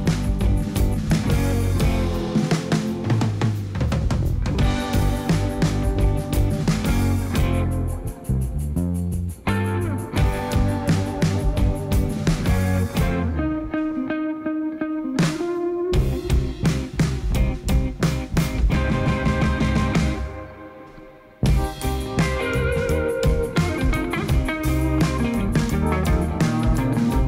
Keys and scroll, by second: 1.8 g, 4.1 g, 7.0 r, 14.3 shift+r, 19.1 g, 21.0 g, 23.3 g, 25.8 shift+z.